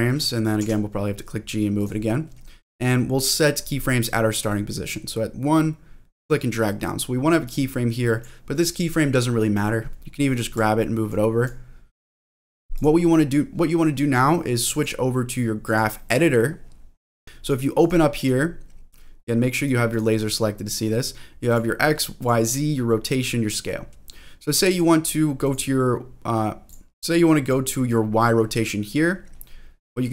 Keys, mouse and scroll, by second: 0.6 g, 1.7 click, 5.5 click, 7.5 click, 8.0 click, 10.5 click, 11.5 click, 12.7 click, 14.7-15.7 drag, 16.6-17.4 scroll down 4, 17.4 click, 17.8 click, 18.2 click, 19.6 click, 19.9 click, 21.5 click, 22.2 click, 23.9 middle click, 24.7 click, 25.4 click, 26.6 click, 27.1 ctrl+z, 27.4 click.